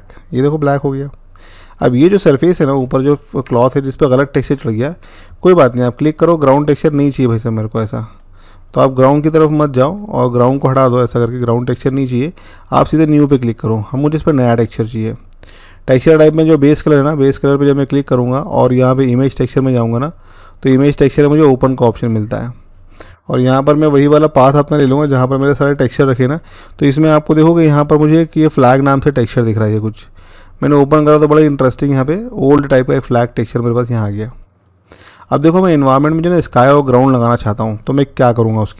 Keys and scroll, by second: 24.4 ctrl+v, 24.9 Return.